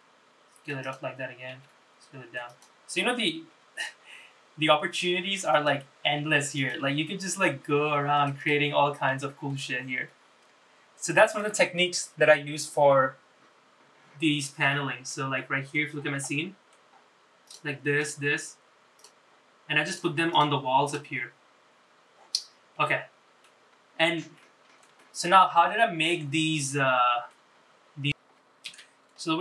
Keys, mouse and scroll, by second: 1.6 s, 3.5 s, 6.1 s, 7.1 g, 8.5 click, 9.0-9.3 scroll down 2, 9.3 shift+middle click, 9.8 scroll up 2, 10.2-11.5 middle drag, 14.4 scroll down 1, 14.7 shift+middle click, 15.5 middle click, 16.1 scroll up 3, 16.3 shift+middle click, 17.0 middle click, 17.0-17.5 scroll up 2, 17.5 click, 18.1 click, 18.5 middle click, 18.5 scroll down 2, 19.1 click, 20.0 click, 20.5 click, 21.0 click, 22.7 scroll down 1, 22.9 shift+middle click, 23.8-24.3 scroll up 3, 24.5 middle click, 25.1-27.5 shift+middle drag, 27.7 scroll up 3, 28.5 middle click.